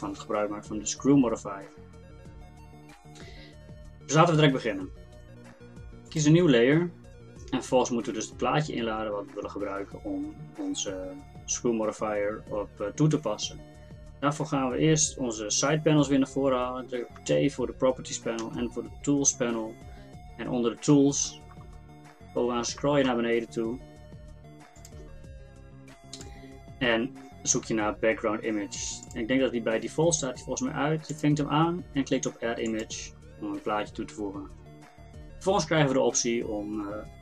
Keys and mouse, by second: 6.1-17.2 drag, 17.2 t, 18.4 n, 24.8-37.2 drag.